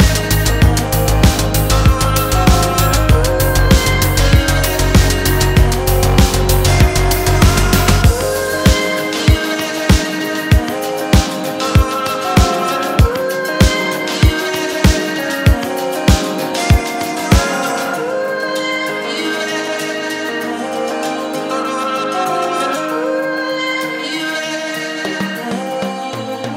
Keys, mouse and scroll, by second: 3.5-5.5 drag, 6.6-9.4 drag, 11.3-14.2 drag, 14.5-15.3 middle drag, 15.6-16.9 scroll up 1, 16.9-19.4 drag, 20.0-21.2 drag, 21.8-22.5 drag, 22.8-25.1 middle drag.